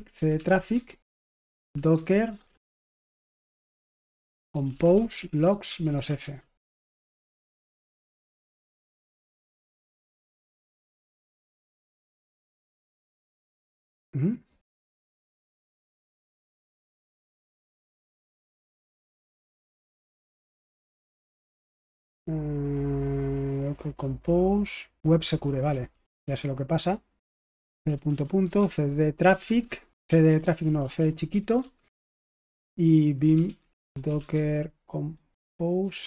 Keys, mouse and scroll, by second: 0.0-6.5 typing, 17.9 ctrl+c, 19.2-20.6 typing, 20.8 Return, 25.4-35.0 typing, 35.8 Return.